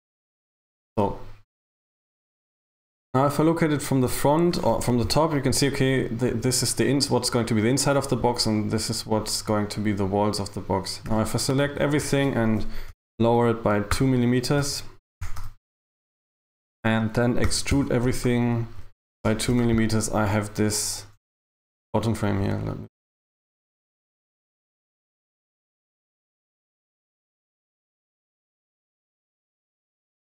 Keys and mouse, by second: 2.0 KP_1, 5.1 KP_7, 6.4 a, 6.6 a, 11.1 a, 11.7 KP_1, 13.0 g, 15.2 g, 17.5 e, 18.1 g.